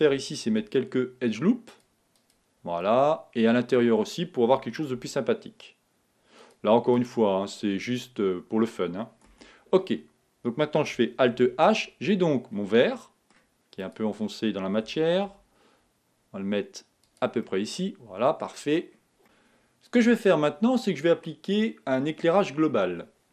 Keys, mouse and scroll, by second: 0.5 ctrl+r, 2.9-5.1 middle drag, 5.1 ctrl+r, 7.5-9.4 middle drag, 9.4 Tab, 11.4 alt+h, 12.4 scroll down 2, 12.8-14.2 middle drag, 14.2 click, 15.0 g, 17.5-18.8 middle drag, 18.8-19.2 scroll down 2.